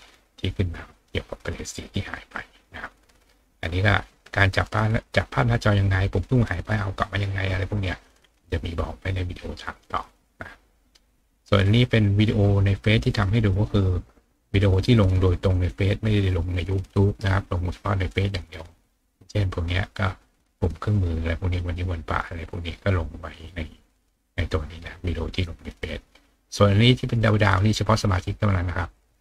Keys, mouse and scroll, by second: 2.3 click, 7.9-9.4 middle drag, 7.9-9.4 scroll up 1, 11.9 click.